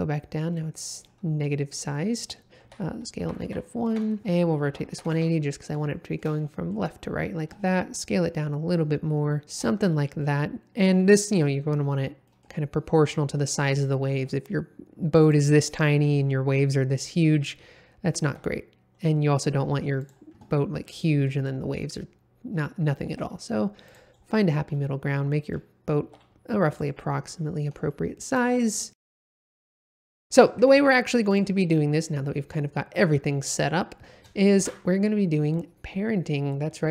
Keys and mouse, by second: 0.5 middle click, 2.6-5.1 typing, 3.2 KP_Subtract, 3.8 KP_Enter, 5.1 KP_Enter, 5.9-6.2 shift+middle drag, 6.4 middle click, 7.7 s, 9.4 shift+middle click, 10.2 middle click, 12.3 middle click, 14.1 s, 15.2 click, 15.6 middle click, 18.2 s, 20.0 click, 21.0 middle click, 23.1 s, 23.8 click, 24.7-25.5 middle drag, 26.0 s, 26.7 click, 27.9-28.3 shift+middle drag, 28.6-29.2 middle drag, 29.2 s, 29.7 click, 30.1 middle click, 30.6 g, 30.7 z, 31.3 click, 32.6 middle click, 34.6 shift+a.